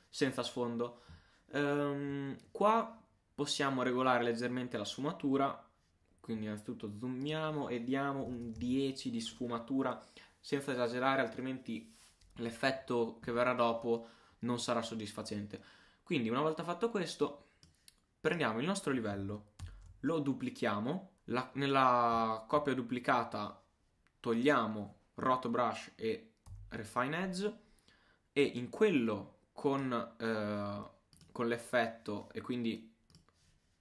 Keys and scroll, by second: 19.6 super+d.